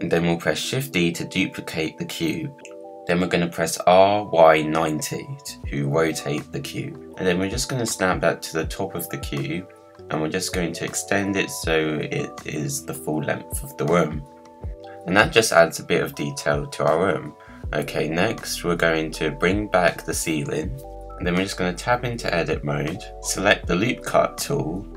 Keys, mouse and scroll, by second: 2.8 r, 5.7 middle click, 6.4 scroll down 1, 6.7 g, 7.9 g, 9.1 middle click, 9.6 click, 10.1-11.1 middle drag, 11.1 g, 14.7 Tab, 15.1-16.7 middle drag, 16.7 click, 17.0-17.4 scroll down 3, 18.7 click, 19.2-19.8 middle drag, 19.8 click, 20.2-20.5 scroll up 2, 20.5-21.5 middle drag, 21.5 Tab, 22.9-24.9 drag.